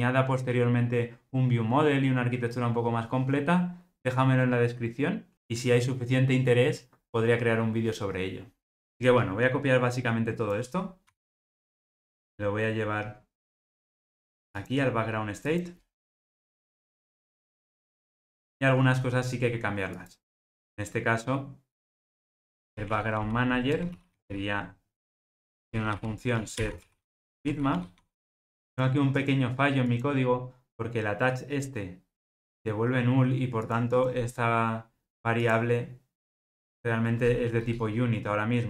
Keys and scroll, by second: 11.1 super+c, 16.4 super+v, 23.7 Return, 37.6 alt+Return.